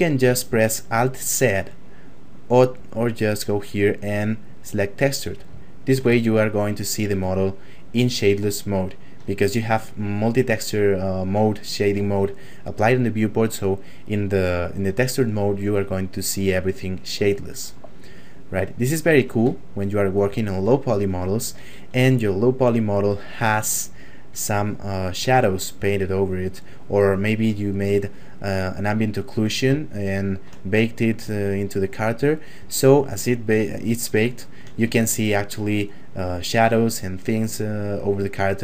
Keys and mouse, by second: 2.7 click, 5.7 shift+middle click, 6.2 ctrl+middle click, 8.6 shift+middle click, 14.4 click, 16.3 shift+middle click, 17.2 shift+middle click, 18.0 click, 19.0 shift+middle click, 19.5 ctrl+middle click, 20.4 shift+middle click, 20.7 middle click, 22.3 click, 29.9 shift+middle click, 30.8 click, 34.1 shift+middle click, 34.9 ctrl+middle click.